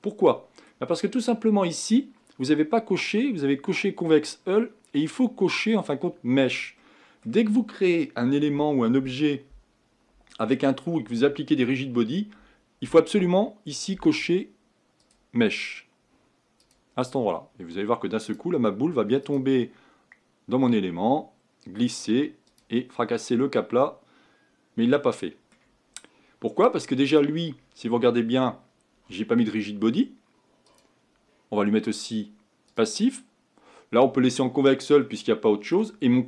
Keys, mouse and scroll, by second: 0.0-3.8 middle drag, 6.8-15.0 middle drag, 15.0-18.0 drag, 18.2-23.0 drag, 23.0 scroll down 2, 23.4-27.1 middle drag, 27.1-30.1 drag, 30.6-34.8 drag, 35.0-36.2 middle drag.